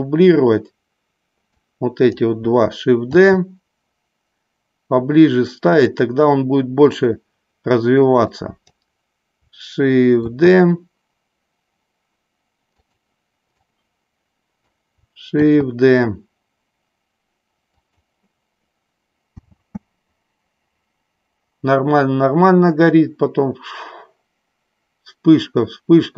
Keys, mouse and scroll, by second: 1.5-2.1 drag, 3.1 shift+d, 8.1-8.8 drag, 10.4 shift+d, 12.9 click, 13.9-14.7 drag, 15.4 shift+d, 19.7 space.